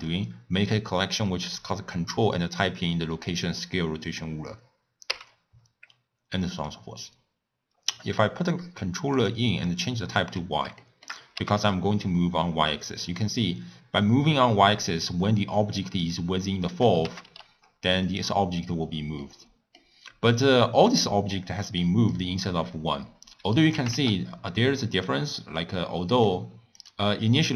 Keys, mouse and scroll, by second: 5.1 n, 6.6-9.3 drag, 10.2 scroll down 3, 10.8 shift+middle click, 11.3 g, 17.0 g, 19.2 scroll up 1, 19.2 middle click, 19.9-20.9 scroll down 2, 20.9 click, 21.3-22.1 middle drag, 22.1 click, 22.6-23.7 scroll up 4, 23.7 g, 25.6-26.8 middle drag, 26.8 click, 27.4-27.5 middle drag.